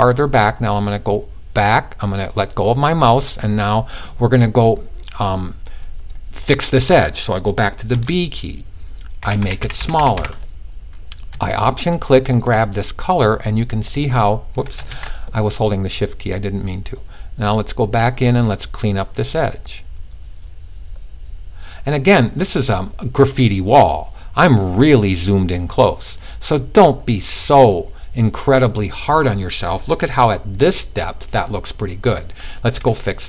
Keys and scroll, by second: 7.4 typing, 8.7-9.7 typing, 14.3 super+z, 14.4 typing.